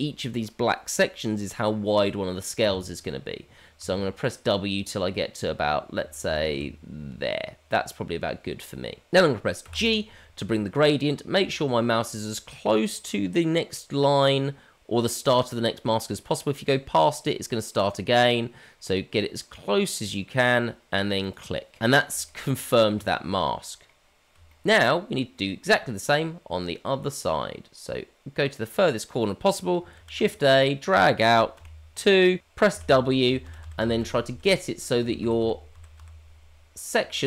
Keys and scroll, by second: 30.0 shift+a.